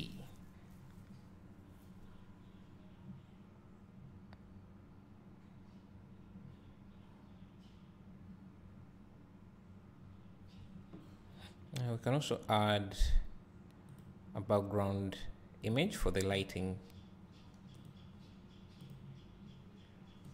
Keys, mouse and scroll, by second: 2.7-14.6 drag, 19.5-20.3 drag.